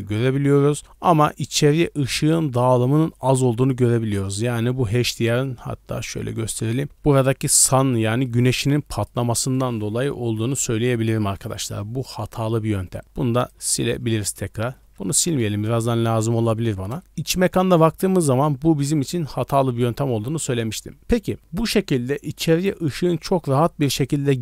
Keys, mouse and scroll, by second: 2.0-3.7 drag, 3.7-4.8 typing, 5.2 middle drag, 5.4-6.5 scroll down 5, 6.3-6.7 middle drag, 7.2 shift+middle drag, 8.0 middle click, 8.4 d, 8.7 click, 9.1 d, 12.7 d, 12.8 right click, 13.0 d, 13.4 right click, 13.5 x, 15.2 ctrl+z, 15.9 middle drag, 16.9 KP_0, 21.1 scroll down 1.